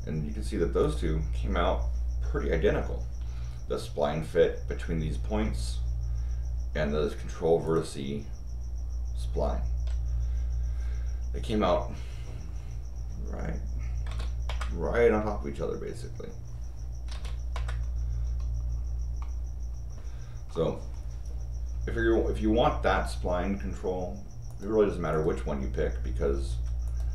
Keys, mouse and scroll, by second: 0.8 click, 3.1 Escape, 7.6 click, 12.9 scroll up 2, 14.0 r, 14.4 Return, 15.2-16.2 scroll up 4, 16.2 scroll down 2, 17.1 r, 17.5 Return, 17.9 middle click, 17.9 scroll down 2, 19.2 middle click, 20.5 middle click, 24.5 click, 25.1 click, 26.5 Escape, 26.8 click.